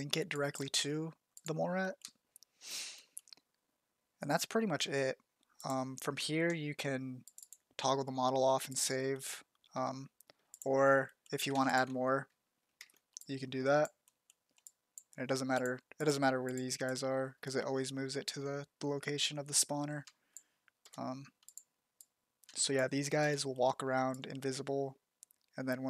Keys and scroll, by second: 20.0 shift+z, 20.8 shift+f, 22.4 shift+z, 23.1 shift+f.